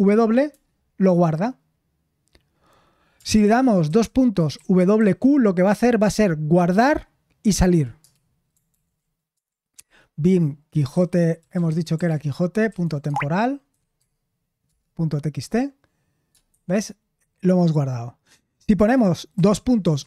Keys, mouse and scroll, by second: 0.5 Return, 4.0-5.4 typing, 8.7 ctrl+p, 9.8 space, 11.8-15.1 typing, 16.5 shift+4, 19.8-20.0 typing.